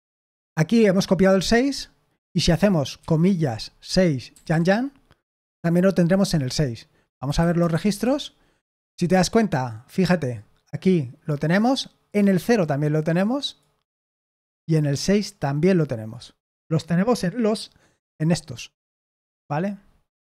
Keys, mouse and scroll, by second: 3.6-4.9 typing, 7.3-8.3 typing.